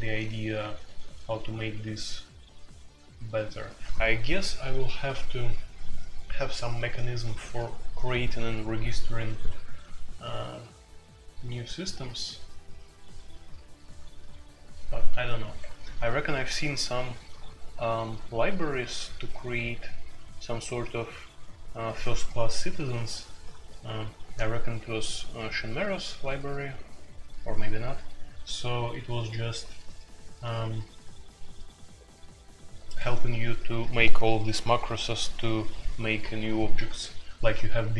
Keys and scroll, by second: 0.0-1.6 typing, 15.4 Escape.